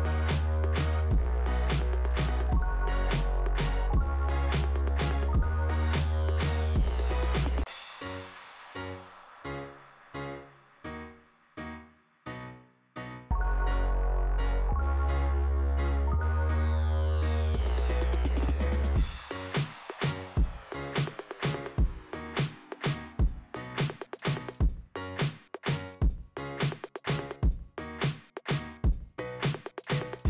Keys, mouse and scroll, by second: 3.1 click, 4.6 click, 6.2 click, 12.6 click, 14.5 click, 17.7 click, 18.7 click, 19.1 click, 19.7 click, 22.5 click, 22.6 click, 23.4 scroll down 2, 25.6 click, 27.8 click, 29.3 click.